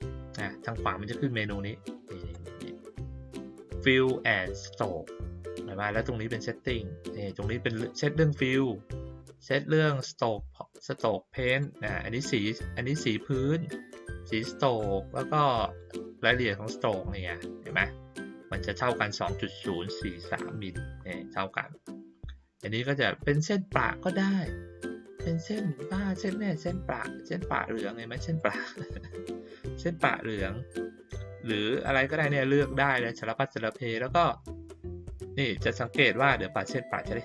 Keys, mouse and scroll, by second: 2.3-3.4 drag, 11.4 click, 12.7 click, 14.1 click, 15.6 click, 23.1 click, 25.7 click, 28.3 click, 32.9 click, 35.7 click.